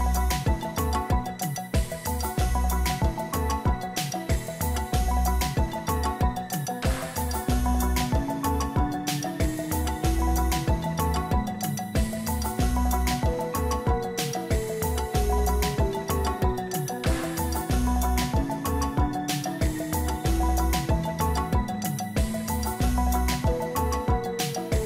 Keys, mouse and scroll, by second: 1.9 right click, 7.7 ctrl+z, 10.1 ctrl+z, 14.4 Delete, 16.8 ctrl+click, 24.7 double click.